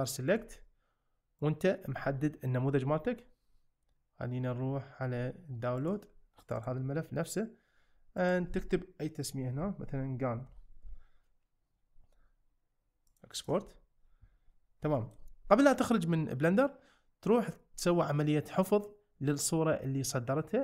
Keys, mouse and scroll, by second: 14.9 shift+middle click.